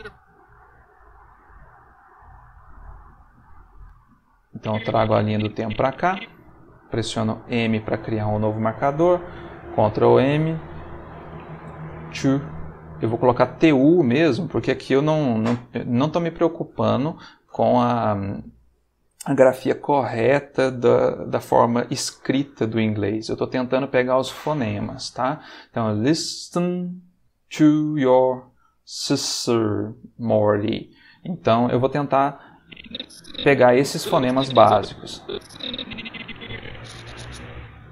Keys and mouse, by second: 1.8 click, 3.4 ctrl+z, 4.5-6.2 drag, 7.4 m, 9.7 ctrl+m, 10.9-12.1 typing, 12.4 shift+Return, 13.9 Return, 32.6-37.4 drag.